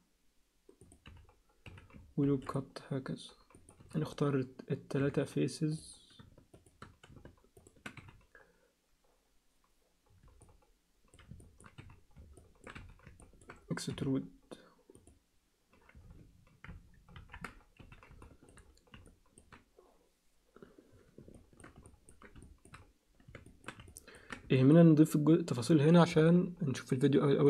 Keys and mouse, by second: 1.1 z, 1.7 z, 2.2 ctrl+r, 3.8 z, 5.0 3, 6.6 shift+click, 8.0 3, 8.0 z, 9.8-11.1 middle drag, 11.4 ctrl+alt+middle click, 11.8 z, 12.4 ctrl+alt+middle click, 12.8 z, 13.2 ctrl+alt+middle click, 13.9 e, 17.1 ctrl+KP_1, 17.8 z, 18.2 alt+shift+middle click, 19.1 ctrl+alt+middle click, 21.3 alt+shift+middle click, 21.8 ctrl+alt+middle click, 22.4 alt+shift+middle click, 23.4 shift+middle click, 23.8 ctrl+alt+middle click, 24.6 alt+shift+middle click.